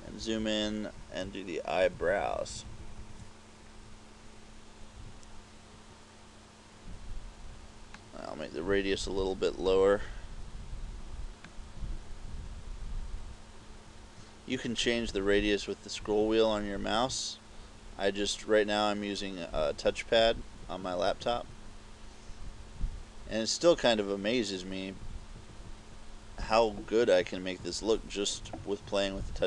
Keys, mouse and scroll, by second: 0.0 KP_Add, 0.3 KP_Add, 0.4 KP_Add, 0.7 KP_Add, 1.9 ctrl+KP_8, 2.0 ctrl+KP_8, 2.2 ctrl+KP_8, 2.5 ctrl+KP_8, 2.7 ctrl+KP_8, 2.9 ctrl+KP_8, 3.0 ctrl+KP_8, 8.0 click, 11.5 click, 27.3 KP_4, 27.7 KP_4.